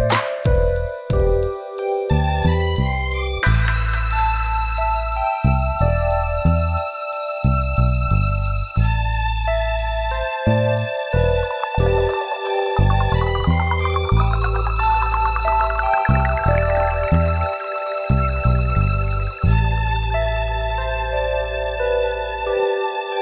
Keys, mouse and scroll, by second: 2.5 click, 3.3 middle click, 4.8 scroll up 1, 5.9 click, 10.3 click, 10.4 click, 12.0 scroll up 1, 13.6 click, 14.5 scroll up 1, 16.2 click, 17.3 click, 20.6 click, 20.7 click, 20.7 click, 20.8 click.